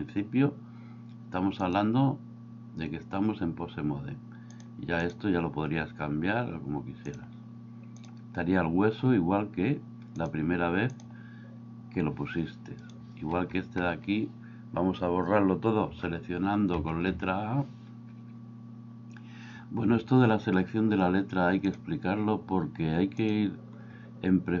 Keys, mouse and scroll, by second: 1.8-3.3 drag, 4.6 click, 7.2 click, 10.3 click, 16.0 a, 16.8 a, 17.1 a, 21.8-24.6 drag.